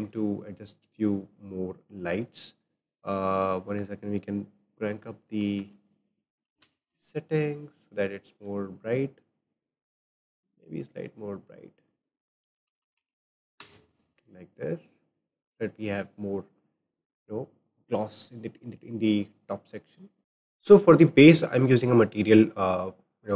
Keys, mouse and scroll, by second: 0.1 click, 2.2 click, 3.8-7.0 drag, 8.4 click, 10.5 click, 11.8-12.8 drag, 12.8 KP_0, 12.9 KP_0, 14.9 click, 15.3-16.4 scroll up 2, 20.2 click, 21.0-22.8 shift+middle drag, 22.8-23.1 scroll up 3.